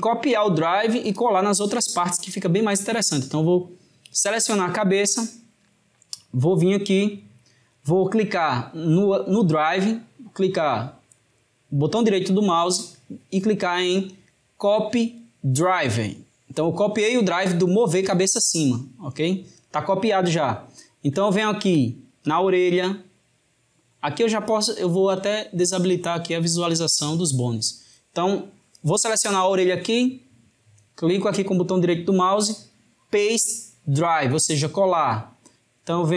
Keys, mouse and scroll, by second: 4.3 drag, 6.5-9.4 middle drag, 11.4-14.4 right drag, 18.2-22.3 middle drag, 22.3 click, 25.4-28.3 drag, 31.3-34.4 right drag.